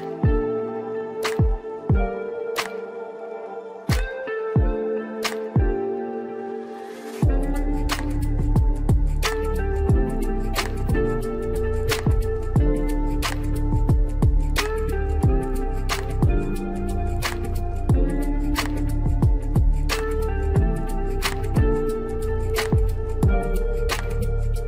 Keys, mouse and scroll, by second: 1.4-2.3 middle drag, 2.3 click, 3.8 shift+a, 21.9 KP_1, 22.8 middle click, 22.8-23.5 scroll up 2, 23.5-24.6 shift+middle drag.